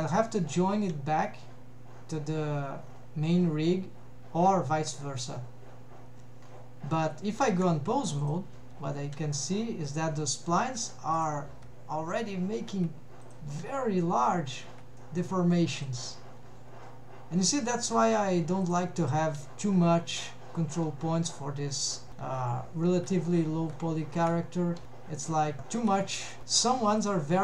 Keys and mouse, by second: 7.5 ctrl+Tab, 8.7 g, 10.9 Escape, 11.2 click, 11.6 g, 12.9 Escape, 13.3 click, 13.6 g, 14.8 Escape, 15.1 middle click, 15.8 click, 16.1 g, 17.6 Escape, 17.9 click, 18.6 click, 19.2 g, 21.9 Escape, 22.3 click, 22.7 g, 23.4 Escape, 23.9 g, 24.6 Escape, 25.5 g.